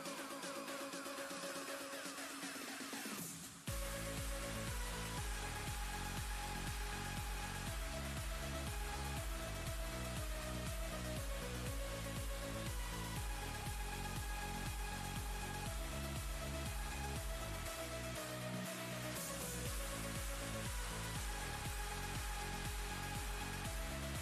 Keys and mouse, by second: 5.8-6.8 alt+shift+click, 9.1 click, 10.9 ctrl+space, 11.0-12.2 ctrl+click, 11.4 ctrl+space, 12.4 space, 12.6 click, 12.9-16.0 space, 14.4 space, 16.3 click, 17.0 ctrl+space, 17.2-18.4 ctrl+click, 17.5 ctrl+space, 18.5 click, 20.3 ctrl+space, 20.4 ctrl+click, 20.6 click, 22.6 ctrl+space, 22.9-24.0 drag.